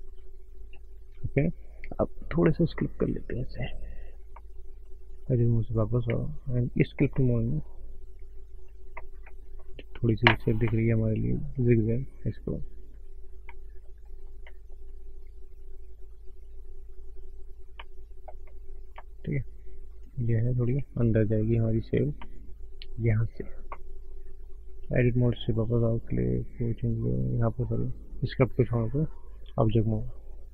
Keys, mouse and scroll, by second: 2.5 click, 4.3 middle click, 4.6-5.4 scroll up 2, 5.4 Tab, 6.7 click, 7.6 click, 9.7-10.2 scroll down 3, 10.2-10.6 scroll up 1, 10.6 middle click, 12.1 click, 12.6 click, 12.8 click, 13.3 click, 13.6 middle click, 14.0 middle click, 14.4 middle click, 15.0 click, 15.3 click, 15.7 click, 15.9 click, 16.2 click, 16.5 click, 16.8 click, 17.0 click, 17.3 click, 17.6 scroll down 1, 17.7 middle click, 18.3 middle click, 18.8 scroll up 1, 18.9 middle click, 19.3 click, 19.7 click, 20.0 click, 20.3 click, 21.0 click, 21.3 click, 21.4 click, 21.8 click, 21.9 click, 22.7 middle click, 25.9 click, 28.1 click.